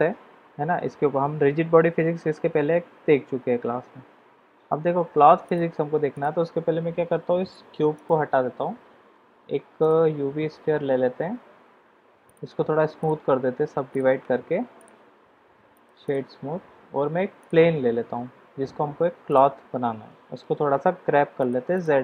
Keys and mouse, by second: 5.5 click, 7.7 x, 8.4 shift+a, 12.2 drag, 13.0-14.0 drag, 14.7 click, 15.7 click, 16.6 shift+a, 17.8 s, 20.1 g.